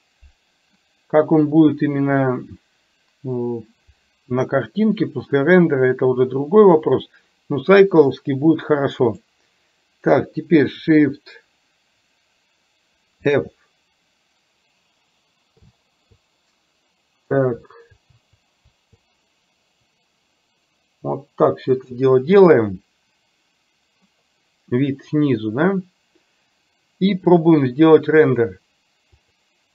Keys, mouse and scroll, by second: 13.3 shift+f, 28.2-29.7 drag.